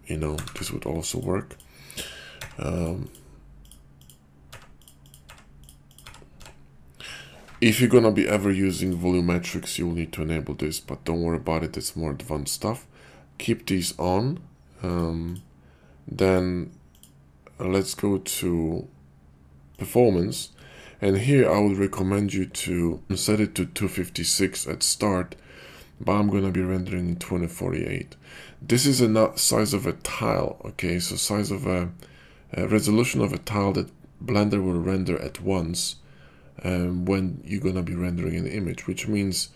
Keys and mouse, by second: 1.5-2.9 drag, 3.0 click, 4.0 click, 5.0 click, 5.9-8.9 drag, 6.3 8, 14.9 click, 15.3 click, 16.1 click, 16.8 click, 19.8 click.